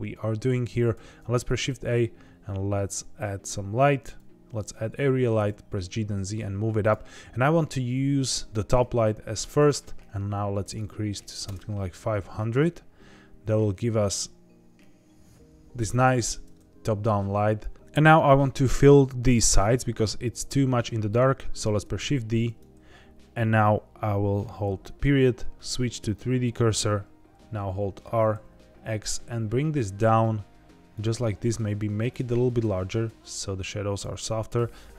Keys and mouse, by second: 0.9 shift+a, 5.3 g, 5.4 z, 6.7 click, 9.5-11.5 drag, 12.5 g, 15.9 click, 21.9 shift+d, 22.4 right click, 28.0 r, 28.3 x, 30.9 click, 32.1-34.0 drag.